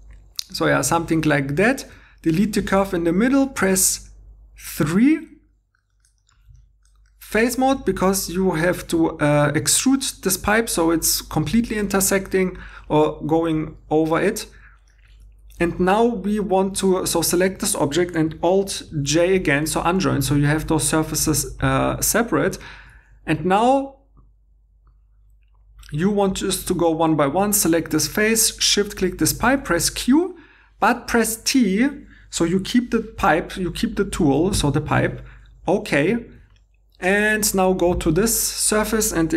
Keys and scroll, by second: 1.9 2, 2.6 x, 3.6 3, 15.1 Tab, 15.7 3, 16.8 Tab, 18.9 alt+i, 29.5 g, 34.5 t.